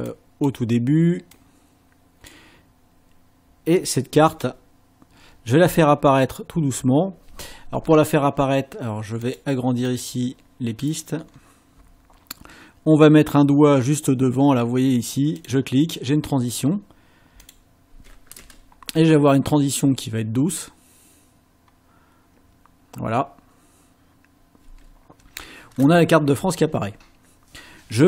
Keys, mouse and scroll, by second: 0.1 click, 1.3-2.5 drag, 4.3 click, 9.3 click, 9.9 click, 10.9-11.5 scroll down 4, 15.4 click, 17.5 click, 18.4 ctrl+space, 24.7 space.